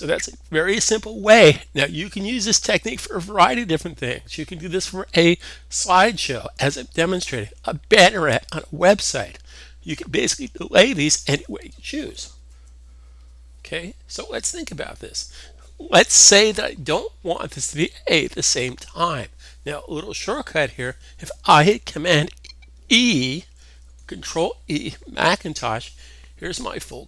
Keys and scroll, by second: 12.4 alt+super+Tab, 23.4 super+e.